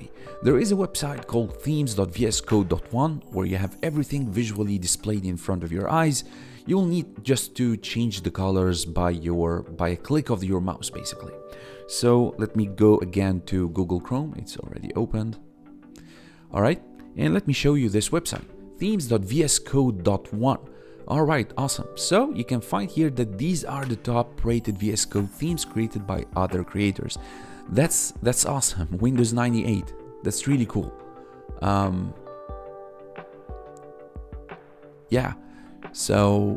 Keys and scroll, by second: 12.5 g, 12.7 o, 17.5 ctrl+v, 18.2 Return, 27.3 1, 35.2 1.